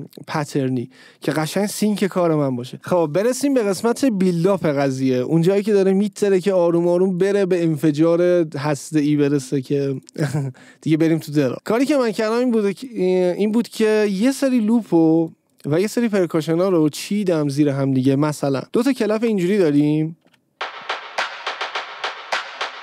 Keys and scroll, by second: 20.8 space.